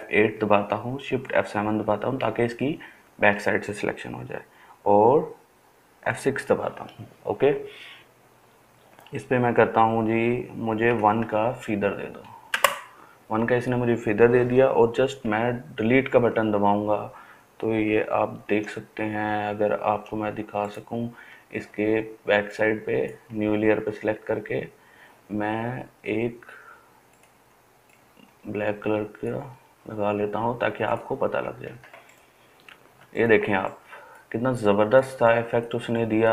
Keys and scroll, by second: 1.1 shift+F7, 6.1 shift+F6, 10.9 1, 12.6 Return, 15.3 Delete, 18.6 ctrl+d, 33.1-36.3 ctrl+space.